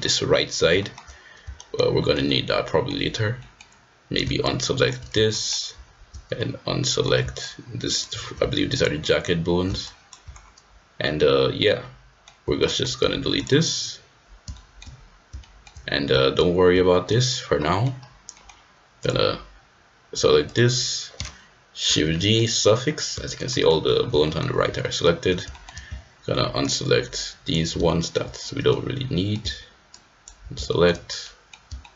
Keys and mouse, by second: 0.8 shift+middle click, 1.5 shift+middle click, 1.9 shift+middle click, 2.2 middle click, 3.4 middle click, 4.4 ctrl+click, 5.3 shift+middle click, 6.3 middle click, 7.4 ctrl+click, 8.7 shift+click, 9.9 ctrl+click, 11.6 middle click, 12.6 shift+middle click, 12.9 x, 14.5 shift+middle click, 15.4 shift+middle click, 17.6 middle click, 18.3 click, 20.4 middle click, 21.8 shift+g, 23.4 shift+click, 24.2 shift+middle click, 24.8 shift+middle click, 25.4 shift+middle click, 26.8 ctrl+click, 27.8 shift+middle click, 28.6 middle click, 29.9 ctrl+click, 30.6 shift+middle click, 31.3 middle click, 31.8 shift+middle click.